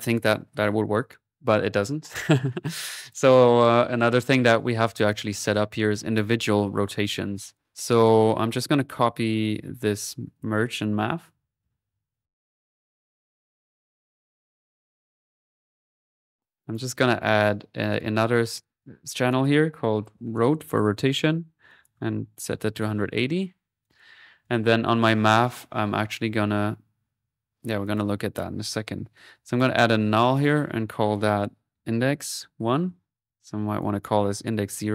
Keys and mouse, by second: 2.9 click, 7.6 click, 7.7 ctrl+z, 8.5 click, 10.3 ctrl+click, 11.3 ctrl+c, 11.4-12.1 typing, 12.1-13.1 ctrl+drag, 13.1 middle click, 13.5 click, 13.9 middle click, 14.4 click, 16.3 click, 16.4 Delete, 16.6 click, 17.9-19.3 drag, 21.7-22.8 drag, 23.3 middle click, 23.8-25.2 drag, 27.4 middle click, 27.8-29.3 drag, 29.3 alt+n, 29.5-31.3 drag, 33.3 middle click, 33.7 click.